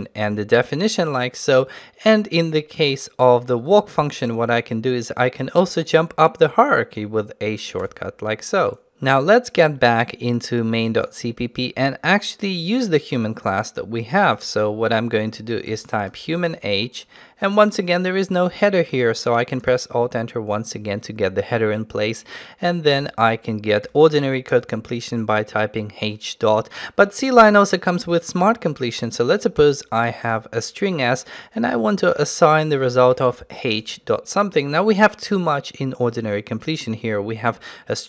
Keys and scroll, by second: 7.8 ctrl+u, 10.1 ctrl+Tab, 19.6 alt+Return.